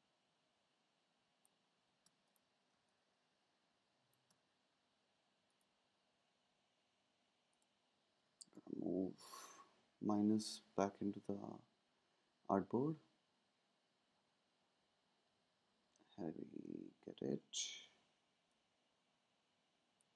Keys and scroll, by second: 1.8 space, 2.7 space, 8.7 shift+Left, 14.7 shift+Up, 15.1 shift+Up, 15.3 shift+Up.